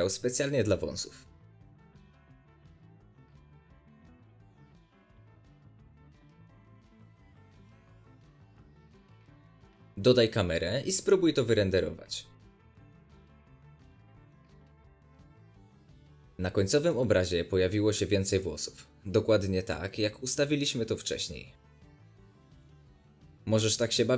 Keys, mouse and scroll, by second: 0.1 middle click, 0.9-2.0 drag, 2.0 middle click, 2.1 click, 2.2 x, 2.3 shift+a, 2.8 click, 3.0 scroll up 2, 3.1-3.8 middle drag, 3.8-4.5 drag, 4.5 middle click, 4.8 click, 5.5 middle click, 5.7-7.9 drag, 6.7-7.5 scroll down 1, 8.4 click, 9.0-11.6 middle drag, 9.4 z, 10.2 shift+a, 10.6 ctrl+alt+KP_0, 10.8 scroll up 1, 11.0 g, 11.6 click, 11.7 r, 12.2 click, 13.2 click, 18.3-18.9 drag, 18.6 scroll down 1, 18.7 scroll up 1, 18.9-20.7 middle drag, 19.2 scroll down 1, 19.7 z, 20.7 click, 21.0-21.6 middle drag, 21.1-21.4 scroll up 2, 21.6 drag, 21.7 middle drag, 21.8-23.9 drag, 23.8 z, 24.0 middle click.